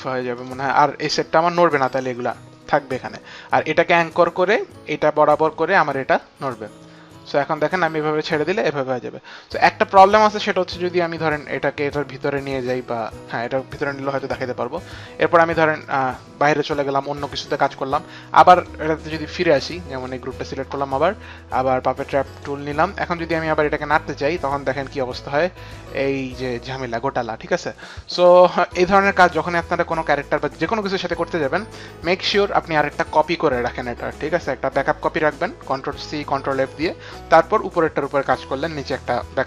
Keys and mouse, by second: 0.2 click, 6.2 click, 10.6 click, 15.6 click, 16.4 click, 19.8 click, 22.1 click, 23.6 click.